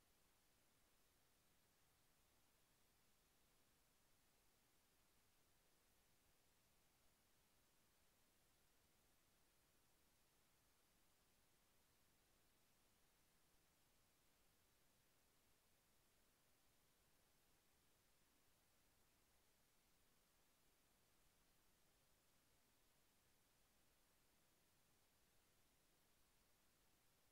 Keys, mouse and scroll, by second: 24.7 click.